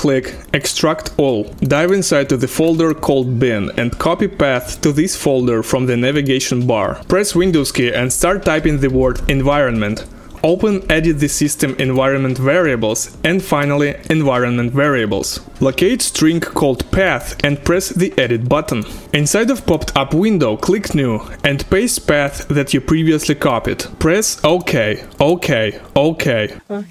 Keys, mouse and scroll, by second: 0.6 click, 0.8 click, 1.4 double click, 1.6 click, 1.7 double click, 2.6 click, 2.8 double click, 3.9 click, 4.6 right click, 6.1 click, 6.9 click, 12.0 click, 12.0-13.4 typing.